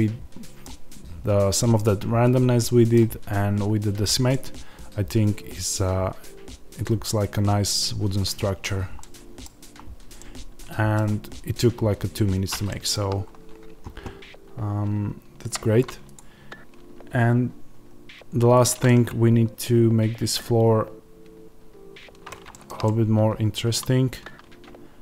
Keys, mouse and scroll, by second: 3.3-3.9 scroll up 2, 3.9-4.2 scroll up 1, 8.6-8.9 scroll down 2, 9.4-10.1 scroll down 2, 11.7-12.6 scroll up 2, 12.6 shift+middle click, 13.1-14.4 scroll up 2, 14.4-16.1 scroll up 1, 16.1 click, 18.8 middle click, 22.4-25.0 shift+middle drag, 24.3 Tab.